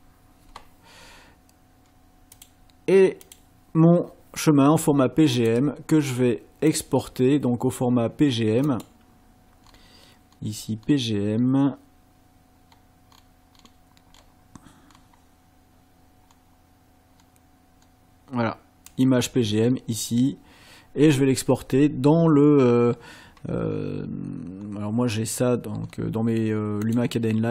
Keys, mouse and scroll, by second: 2.3 click, 3.2 click, 5.4 click, 6.7 click, 8.7 click, 9.6-9.9 scroll down 2, 10.3-11.1 scroll down 4, 12.7 scroll up 2, 13.2-13.8 scroll down 4, 14.1 scroll down 2, 14.9 scroll down 2, 16.3 scroll down 2, 17.2 scroll down 2, 18.9 click, 24.6-25.0 scroll down 2, 25.1 scroll down 2, 25.8 scroll down 2, 26.9 click.